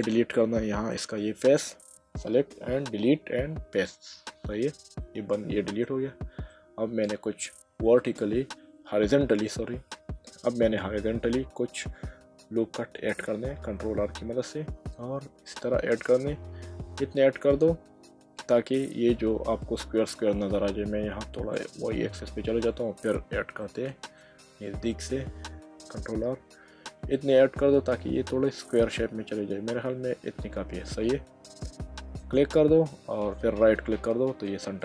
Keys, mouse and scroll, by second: 2.8 Delete, 3.9 click, 4.7 middle click, 6.5 middle click, 13.9 ctrl+r, 19.7 Escape, 21.5 click, 23.6 shift+middle click, 25.7 ctrl+r, 32.2 click, 33.6 right click, 34.5 middle click.